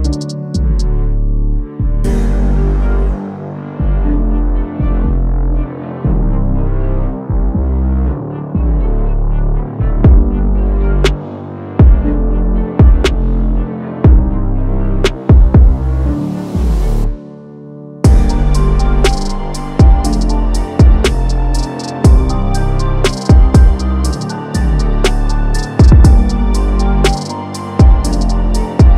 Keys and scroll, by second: 6.3 ctrl+d.